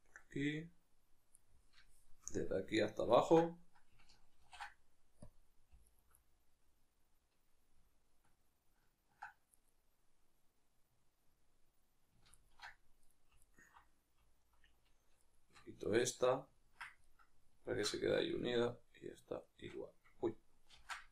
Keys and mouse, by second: 0.2-1.4 middle drag, 1.4-1.8 right drag, 1.8-3.1 shift+middle drag, 3.1 ctrl+right click, 4.4 ctrl+e, 5.9 alt+right click, 6.2-9.6 middle drag, 9.6 right click, 12.3 ctrl+alt+right click, 13.4 alt+right click, 15.9-19.4 middle drag, 19.4-20.8 shift+right drag, 20.8 ctrl+z.